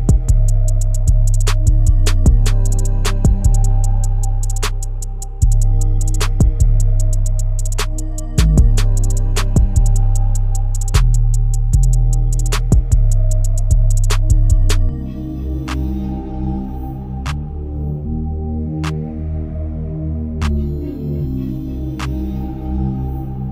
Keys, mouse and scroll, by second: 0.7 Tab, 1.9-3.0 shift+middle drag, 3.0-4.0 scroll up 1, 4.0 ctrl+r, 7.5 s, 11.8 Tab, 13.0-15.3 drag, 15.3-16.3 right drag, 16.3-16.8 shift+middle drag, 16.8-17.2 scroll up 5, 17.2-18.4 shift+middle drag, 18.4 Tab, 20.7-21.5 scroll up 1, 21.5 s, 22.5 shift+middle click, 22.9-23.5 scroll up 1.